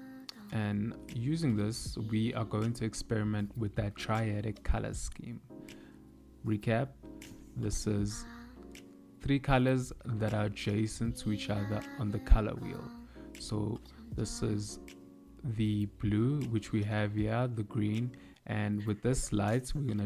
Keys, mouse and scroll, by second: 0.2 g, 5.6 KP_7, 8.1 g, 17.0 click, 18.4 middle click, 19.9 z.